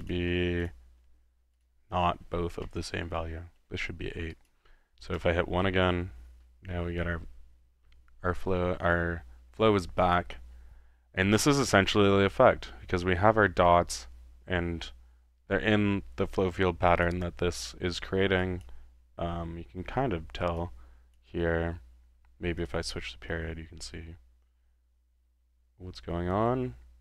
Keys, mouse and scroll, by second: 0.2-1.0 drag, 1.6-2.2 drag, 2.7-3.7 middle drag, 4.3 click, 4.9-5.7 typing, 10.0 click, 17.0-18.1 drag, 18.4-18.8 drag, 20.6-21.3 drag, 22.6-27.0 drag.